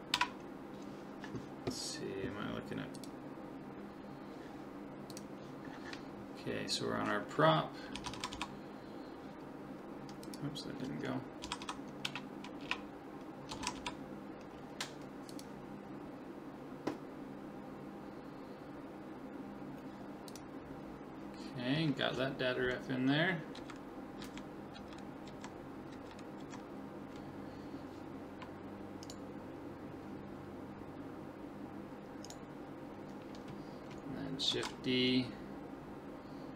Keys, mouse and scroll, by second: 23.6 Right, 24.2 Left, 24.8 Right, 25.3 Left, 25.9 Right, 26.4 Left, 29.1-30.9 right drag, 29.6-31.6 middle drag, 32.3-34.2 right drag, 34.5 shift+d.